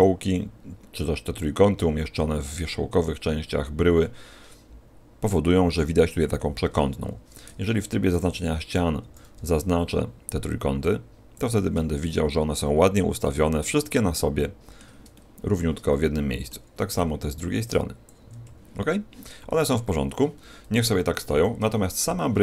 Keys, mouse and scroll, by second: 2.8-4.8 scroll down 4, 15.1 middle click, 20.6 KP_1, 22.1 middle click.